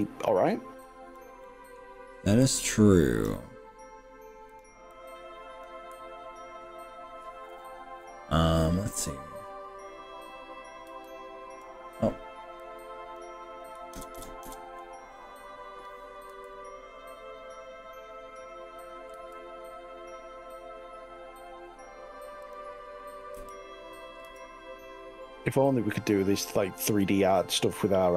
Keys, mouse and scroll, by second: 0.0 click, 0.9 click, 1.4 middle click, 2.8 click, 4.6 click, 5.0 click, 10.9 ctrl+z, 12.6 click, 14.0 ctrl+KP_Add, 14.2 ctrl+KP_Add, 14.6 ctrl+KP_Add, 16.3 s, 16.4 ctrl+KP_Add, 19.1 x, 22.6 click, 23.4 g, 24.4 x, 27.6 click.